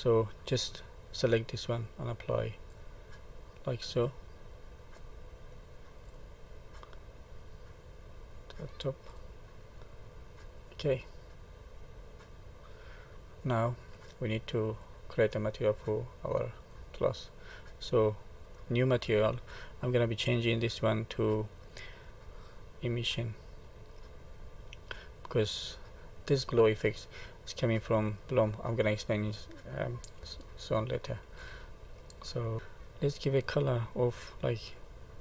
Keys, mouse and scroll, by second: 0.3-1.0 scroll up 1, 1.0 click, 4.8 click, 7.4 click, 9.7 middle click, 14.5 click, 15.5 middle click, 18.4 click, 20.9 click, 25.2 middle click, 30.5 shift+middle click, 31.7 scroll up 1, 32.3 middle click, 33.1 click.